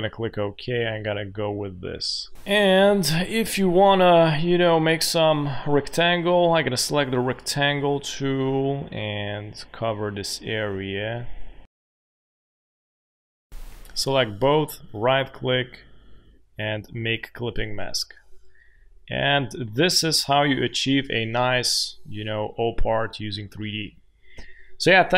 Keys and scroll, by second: 2.0 space, 2.3 Delete, 2.8 space, 11.2 shift+x, 13.2 shift+x, 19.2 space.